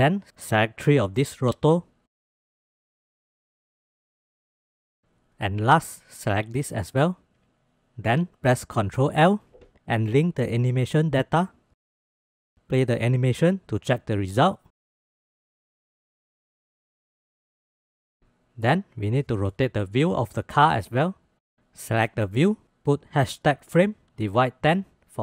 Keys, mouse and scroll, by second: 0.0 shift+drag, 2.0 click, 2.1 shift+middle click, 2.2 shift+middle click, 2.5 middle click, 3.4-3.8 middle drag, 4.6 shift+click, 6.8 shift+click, 8.7 ctrl+l, 12.3-13.1 drag, 13.1 space, 13.9-14.7 drag, 15.2-15.8 drag, 16.2-16.8 drag, 18.7 shift+click, 19.5-19.9 drag, 20.4 shift+drag, 20.9 shift+click, 21.2-21.6 drag, 23.5-25.2 shift+drag.